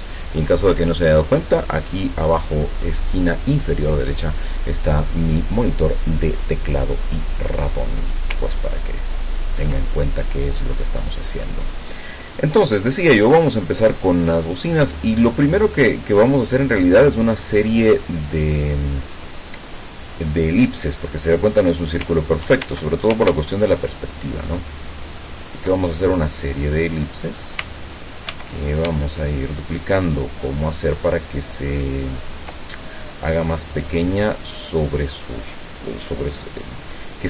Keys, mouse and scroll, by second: 8.5-9.2 ctrl+scroll up 4, 10.3 click, 11.3 scroll down 2, 11.8 scroll up 2, 13.0 click, 22.7 ctrl+d, 24.1-25.8 ctrl+shift+drag, 27.0 click, 28.3 ctrl+d, 29.7-32.5 ctrl+shift+drag, 33.9 click.